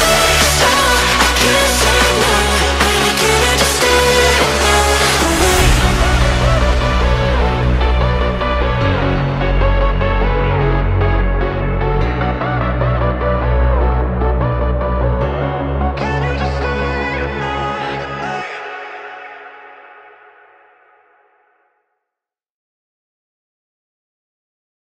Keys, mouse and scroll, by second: 0.8 click, 1.9 click, 2.2-4.3 drag, 5.2-6.7 drag, 6.7-7.9 middle drag, 7.9 click, 8.3-10.1 middle drag, 10.1 click, 10.6 middle click, 11.4 KP_0, 12.3-14.0 middle drag, 14.0 KP_1, 14.6-15.1 shift+middle drag, 15.1-16.3 scroll down 2, 16.3 ctrl+s, 16.7-20.0 middle drag, 20.0-20.5 scroll down 2, 20.5-23.4 scroll up 2, 23.4 click, 24.0 click.